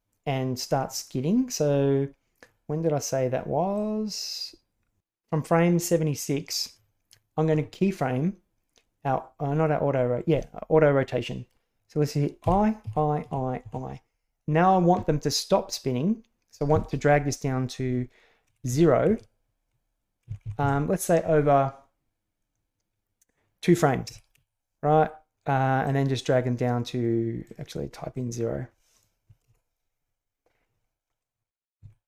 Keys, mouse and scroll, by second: 3.7-5.0 middle drag, 12.4 i, 12.8 i, 13.2 i, 13.6 i, 18.4 Right, 18.6 Right, 19.0 Right, 20.2 Left, 20.4 Left, 20.6 Left, 24.1 Right, 24.3 Right, 25.7-27.8 drag, 28.2-29.5 drag, 31.8 Left.